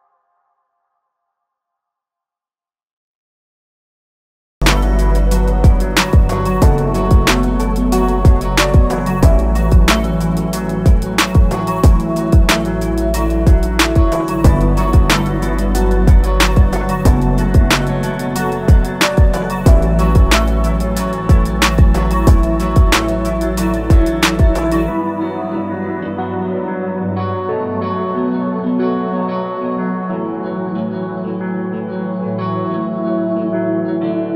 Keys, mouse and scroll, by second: 2.6 click, 12.5 shift+click, 14.1 click, 16.1 click, 22.6 shift+click, 23.3 shift+click, 24.3 click, 25.0 click, 33.2 click.